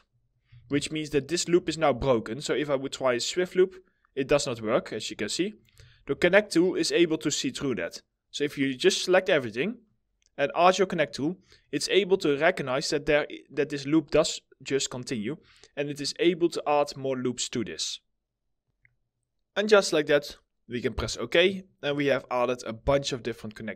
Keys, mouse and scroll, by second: 0.3 right click, 0.5 w, 0.9 alt+middle click, 1.3 alt+click, 5.3 right click, 5.3 alt+middle click, 5.8 ctrl+z, 6.5 alt+middle click, 6.8 middle click, 6.8 alt+scroll down 1, 9.4-10.3 scroll up 1, 11.6 alt+middle click, 15.6 alt+middle click, 21.4 middle click, 22.2 alt+middle click.